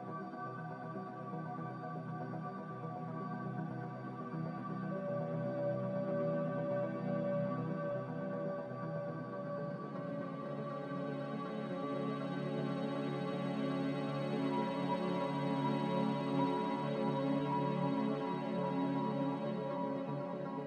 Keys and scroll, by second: 1.6 z.